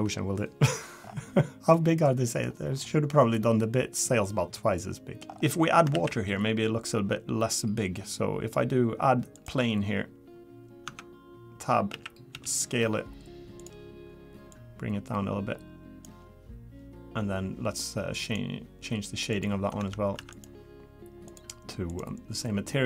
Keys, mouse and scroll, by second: 1.0-1.5 scroll up 4, 1.5 middle click, 1.5 scroll down 2, 1.7 middle click, 2.2 middle click, 2.7 scroll down 3, 3.3 middle click, 5.3 scroll up 3, 5.6 scroll down 2, 5.9 shift+a, 10.8 Tab, 11.9 a, 12.3 s, 14.5 click.